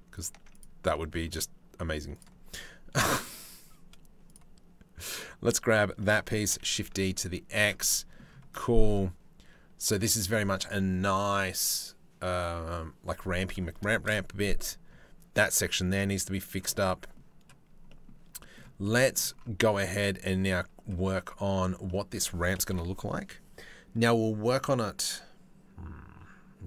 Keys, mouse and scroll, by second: 0.2 click, 0.8 shift+middle click, 1.8 click, 3.9 middle click, 6.1 shift+d, 7.4 middle click, 8.2 middle click, 8.4-9.8 middle drag, 13.5 shift+middle click, 13.8 middle click, 15.5 middle click, 16.5 middle click, 17.5 middle click, 18.0 shift+middle click, 18.5 middle click, 19.2 shift+middle click, 21.5 middle click, 22.3 KP_7.